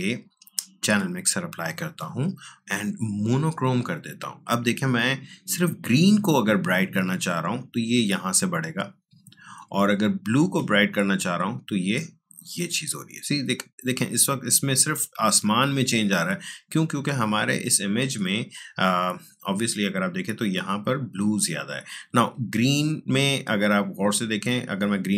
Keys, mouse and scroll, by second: 6.5-18.8 drag, 23.7-25.1 drag.